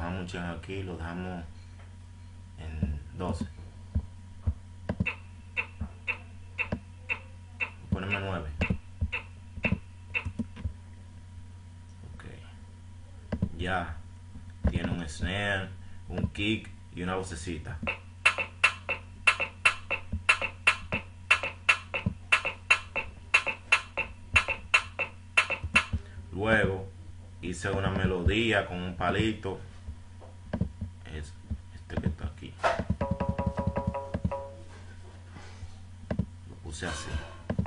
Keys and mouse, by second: 4.5 space, 5.3 space, 9.3 F1, 13.1 F1, 15.7 F6, 28.3 F1.